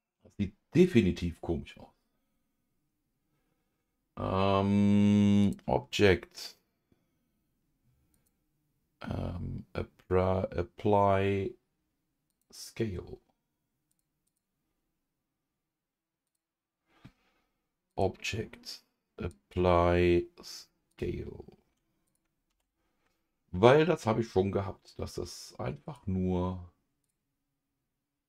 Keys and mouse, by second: 5.4-12.4 drag, 13.9 click, 14.2 click, 16.2 click, 17.9-20.9 drag, 22.0 click, 22.5 ctrl+s, 25.8 click.